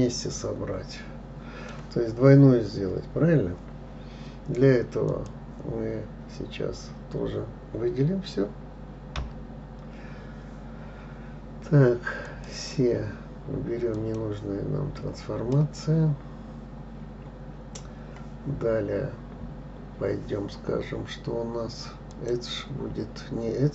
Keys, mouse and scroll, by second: 5.5 click, 9.6 l, 12.7 click, 15.9-18.9 middle drag, 22.5-23.7 drag.